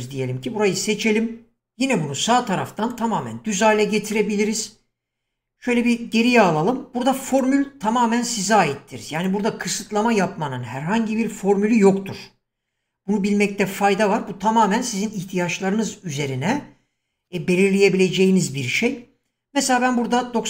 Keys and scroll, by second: 5.6 ctrl+z.